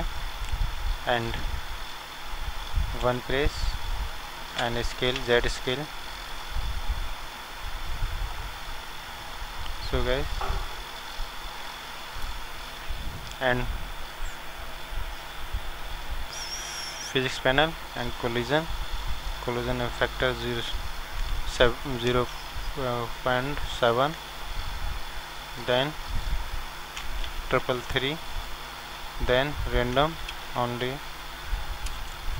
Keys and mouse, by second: 0.0-3.0 drag, 3.0 KP_1, 4.6 s, 9.4-11.1 right drag, 11.1 click, 14.0-22.2 drag, 26.0-29.2 drag, 27.7 KP_3, 29.2-31.0 drag, 32.0 BackSpace.